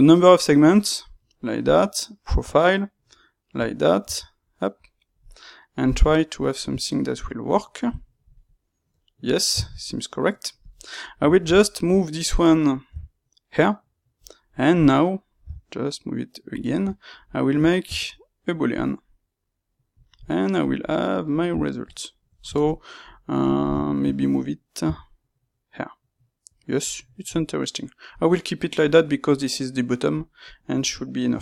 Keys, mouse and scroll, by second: 10.6 click, 10.9-14.3 ctrl+middle drag, 12.8 g, 14.3 click, 15.3 g, 17.0 shift+click, 17.8 space, 19.9 click, 20.0-26.6 middle drag, 24.7 g, 26.6 click, 26.8-31.4 middle drag.